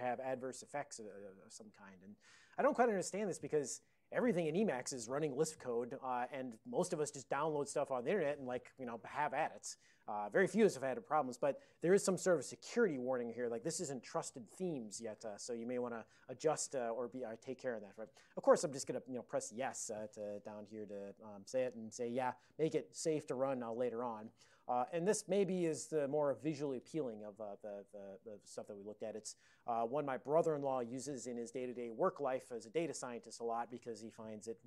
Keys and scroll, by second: 25.1 ctrl+p, 25.3 ctrl+p, 25.5 ctrl+p, 26.2 ctrl+n.